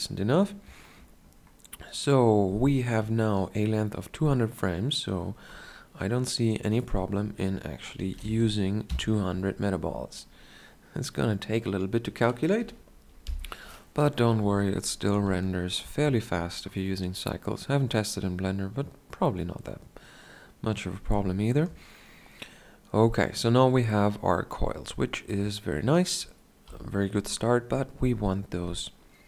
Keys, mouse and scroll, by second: 8.5-13.4 drag, 8.5 KP_0, 15.6-17.2 shift+scroll down 1, 21.5 shift+scroll down 1, 23.2 shift+scroll down 1, 24.6 shift+scroll down 1, 25.4 scroll down 1, 26.8 KP_1.